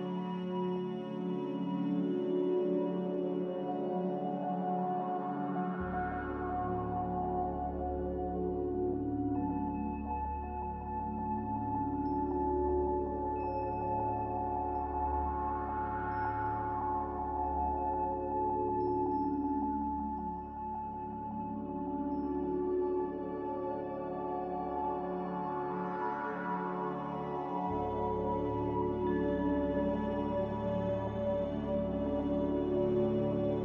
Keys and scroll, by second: 0.0-1.7 typing, 13.3 q, 23.5-24.6 typing, 28.7 s.